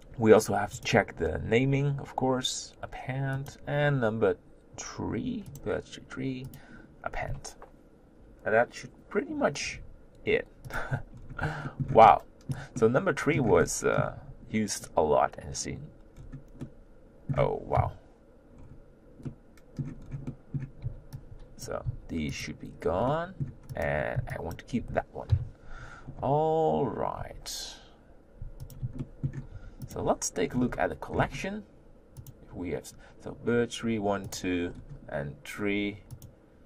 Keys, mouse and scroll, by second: 3.6 drag, 10.7 click, 11.1-11.7 scroll down 2, 11.7 shift+middle click, 11.9 scroll up 1, 12.0-16.1 middle drag, 16.1-16.6 scroll down 1, 16.6-17.4 middle drag, 17.4-17.8 scroll up 1, 17.8 KP_1, 18.6-19.2 scroll up 2, 19.2 middle click, 20.0-20.3 scroll down 2, 20.3-21.8 middle drag, 21.8 b, 21.9 x, 23.1-23.9 middle drag, 23.9 click, 24.5 b, 25.3 KP_1, 26.0-27.2 scroll up 2, 27.2 g, 29.0-29.6 shift+middle drag, 29.6 g.